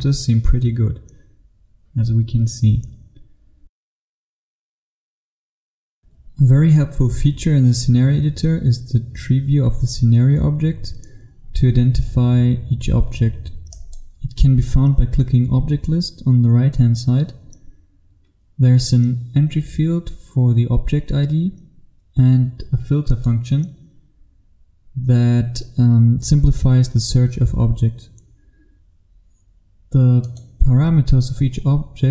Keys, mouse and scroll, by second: 5.3 click, 6.0 F1, 13.8 click, 24.1-27.4 scroll down 1, 27.4-30.4 scroll down 1, 30.4 click.